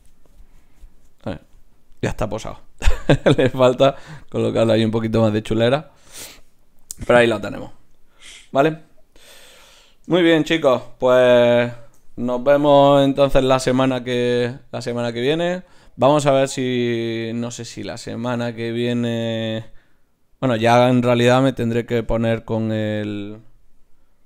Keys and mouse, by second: 9.6-12.9 drag, 12.9 Left.